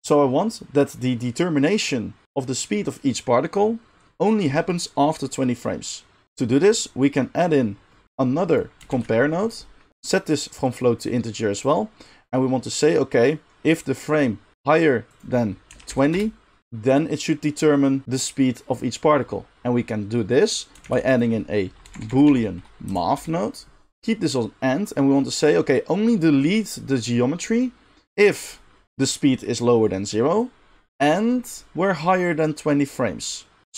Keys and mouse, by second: 8.6-10.6 shift+middle drag, 8.9 shift+a, 10.6-23.9 drag, 20.8 shift+a, 22.1 o, 23.9-28.2 middle drag, 28.2-33.7 drag.